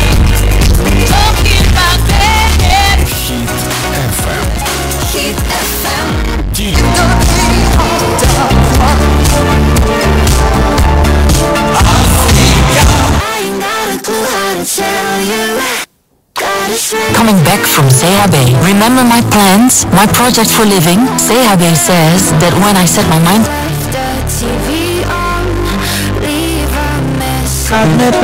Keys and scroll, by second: 3.0 Page_Down, 13.7 Page_Down, 23.4 Page_Down.